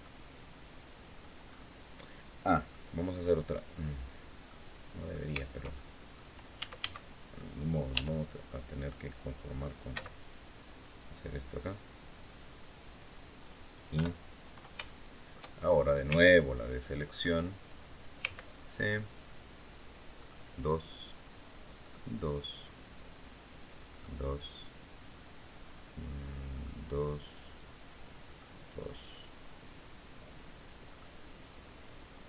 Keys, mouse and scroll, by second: 1.2-1.6 scroll up 2, 1.7 scroll down 2, 2.4 click, 4.2 click, 5.1 shift+click, 5.8 middle click, 6.3 a, 7.6 e, 9.6 z, 12.7 click, 13.7 KP_7, 14.6 shift+middle click, 15.6 scroll up 2, 15.9 shift+click, 17.9 c, 19.9 click, 21.6 click, 23.6 click, 26.3 click, 28.0 click, 30.6 click.